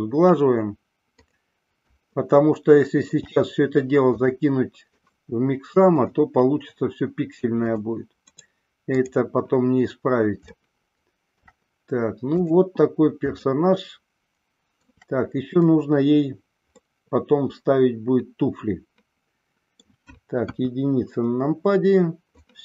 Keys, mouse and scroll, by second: 0.0-1.5 right drag, 2.4-3.4 shift+middle drag, 4.4 click, 5.2 right click, 8.6 right click, 10.7-11.7 shift+middle drag, 12.5 click, 13.5-14.1 shift+middle drag, 14.5 shift+middle click, 16.9-19.9 middle drag, 20.6 KP_1.